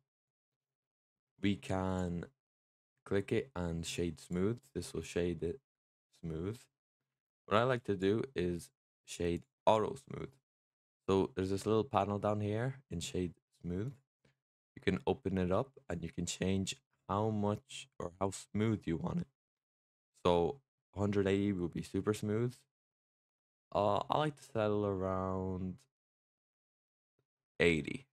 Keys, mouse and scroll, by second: 0.7-1.0 middle drag, 1.0-1.5 scroll down 2, 1.5 drag, 2.4-4.1 right drag, 4.1 click, 4.5 middle drag, 4.7-5.2 scroll up 4, 5.2-6.8 middle drag, 6.8-7.3 scroll down 4, 7.6 click, 8.4-9.7 right drag, 9.7 middle drag, 9.9-10.4 scroll up 3, 13.7-18.8 drag.